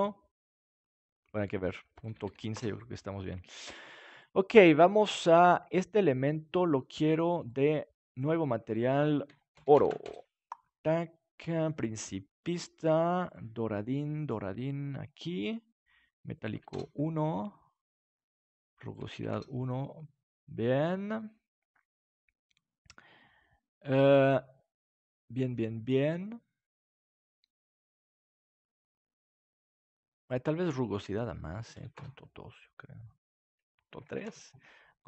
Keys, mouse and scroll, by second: 2.0-3.9 drag, 3.9 ctrl+s, 6.1 click, 6.6-8.3 right drag, 7.3-10.6 drag, 11.2-15.0 drag, 16.4 click, 16.9-18.4 drag, 18.9-20.5 drag, 25.1-27.7 middle drag, 31.3-33.1 drag, 33.8 click, 34.4-35.0 drag.